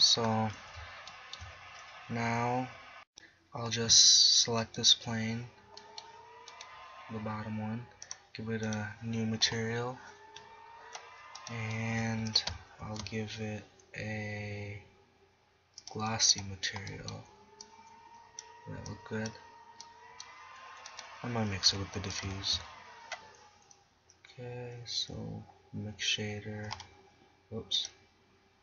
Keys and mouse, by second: 0.0 KP_7, 4.7 right click, 8.8 click, 10.5 middle click, 12.0 g, 12.9 shift+a, 16.7-18.4 drag, 21.0-21.8 right drag, 21.8 g, 22.3 click, 22.4 shift+a, 27.8-28.6 drag.